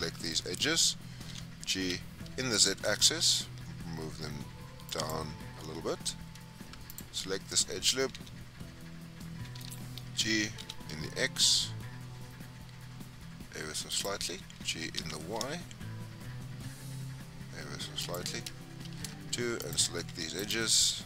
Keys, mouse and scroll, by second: 0.1 scroll down 3, 0.3 middle click, 1.3 g, 5.8 scroll up 2, 6.9 alt+click, 8.1 g, 14.6 g, 18.8 2, 19.6 alt+click, 20.4 alt+shift+click.